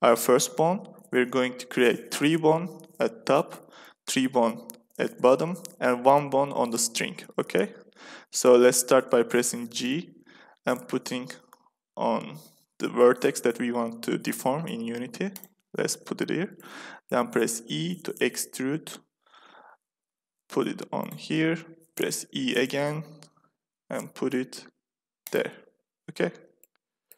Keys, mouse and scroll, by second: 9.5 g, 9.8 click, 16.1-17.4 middle drag, 17.4 e, 18.4 click, 21.9 e, 26.0-27.1 middle drag.